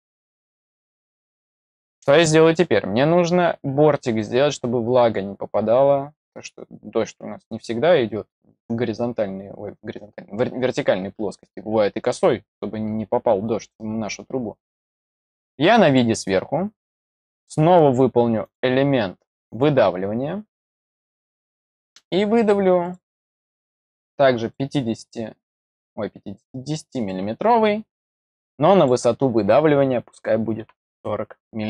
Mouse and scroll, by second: 15.8 click, 18.4 click, 19.4 click, 20.6 middle click, 21.5 click, 22.8 click, 24.3 click, 25.5 click, 26.9 click, 28.7 click.